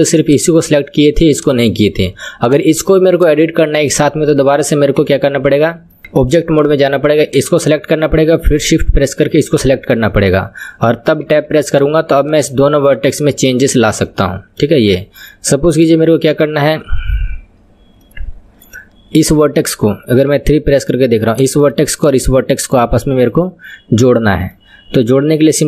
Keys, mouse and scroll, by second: 0.6 click, 1.6 click, 2.8 click, 3.4 click, 5.1 KP_1, 5.9 middle click, 6.0 Tab, 6.6 click, 7.5 click, 8.6 shift+click, 11.4 Tab, 11.9 click, 12.6 click, 13.1 click, 13.8 click, 14.1 middle click, 15.0 click, 15.8 KP_1, 18.1-19.3 middle drag, 19.3 click, 20.3 KP_3, 21.4 click, 22.4-25.2 middle drag, 25.2 KP_3.